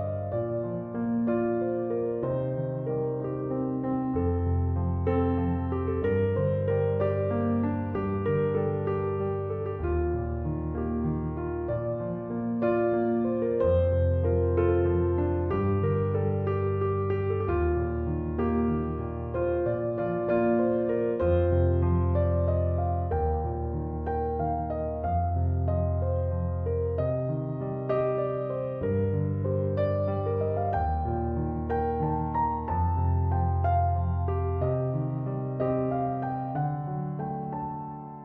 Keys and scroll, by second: 23.5 Return.